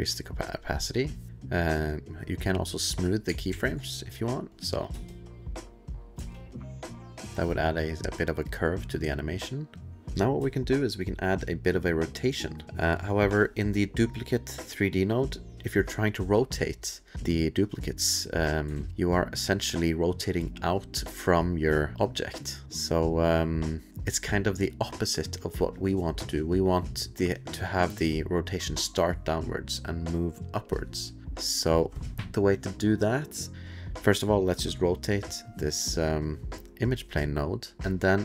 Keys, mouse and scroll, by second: 1.3 click, 1.3 middle click, 1.3 space, 1.9 click, 2.5 click, 3.5 shift+s, 4.5 click, 4.9 space, 6.1 space, 6.8 click, 7.9 click, 10.0 ctrl+s, 10.0 space, 10.4 space, 11.0 click, 13.7-17.1 drag, 17.7 click, 18.6 ctrl+click, 18.7 ctrl+z, 18.9 click, 23.9 click, 31.5-33.5 drag, 33.5-34.3 middle drag, 34.4 middle click, 34.8 click, 37.8 click, 37.8 7.